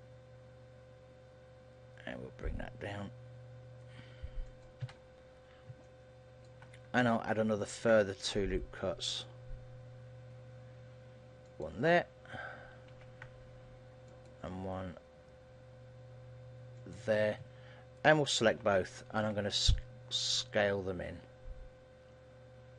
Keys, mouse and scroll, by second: 4.7 click, 4.9 a, 5.5-6.3 scroll up 3, 5.9 shift+middle click, 7.7 ctrl+r, 18.2 right click.